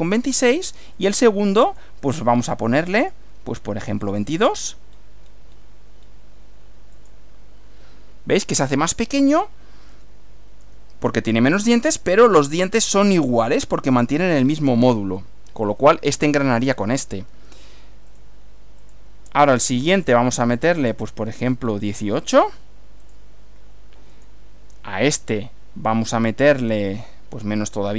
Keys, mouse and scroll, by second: 0.1 click, 0.9 click, 1.7 click, 3.0 click, 3.5 scroll down 1, 4.4 scroll up 2, 4.9 scroll down 2, 5.3 scroll up 2, 6.0 scroll down 2, 7.0 click, 9.4 scroll up 2, 10.0 shift+middle click, 14.4 scroll down 1, 15.1 shift+middle click, 18.1 click, 18.8 click, 20.0 click, 20.8 click, 21.3-22.1 scroll down 2, 23.0 click, 24.1 click, 27.6 click.